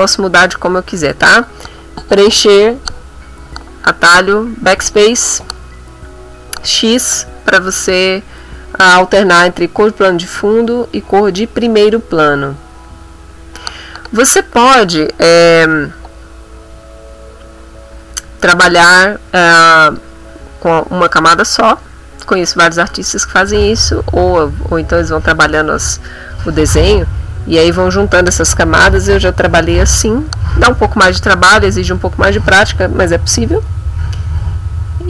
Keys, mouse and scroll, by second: 19.0 click, 19.6 click.